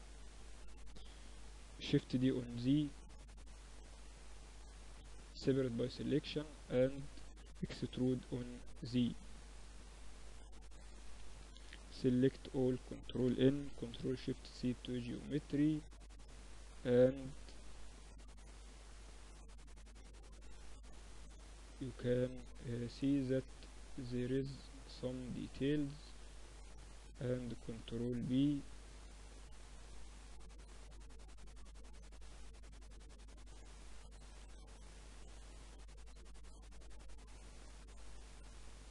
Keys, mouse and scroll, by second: 1.3 shift+d, 4.3 p, 5.0 Tab, 5.3-7.1 drag, 5.7 Tab, 6.1 a, 7.0 e, 10.2 a, 10.3 a, 11.1 ctrl+n, 11.4 Tab, 12.8 ctrl+alt+shift+c, 14.3-16.0 drag, 15.9 middle click, 19.2-20.8 middle drag, 22.1 Tab, 22.9 ctrl+r, 25.9 ctrl+b, 28.9 click, 29.6 middle click, 30.4-32.2 drag, 32.2-33.3 middle drag, 33.3 click, 33.5 ctrl+z, 34.0-35.9 middle drag, 35.9-37.8 drag, 37.8 Tab, 38.1-38.9 middle drag.